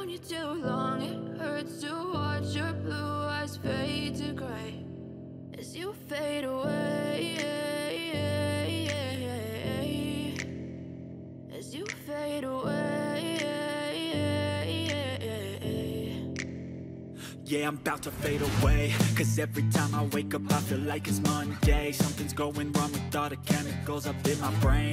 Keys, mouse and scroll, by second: 2.5 ctrl+click, 24.6 shift+click.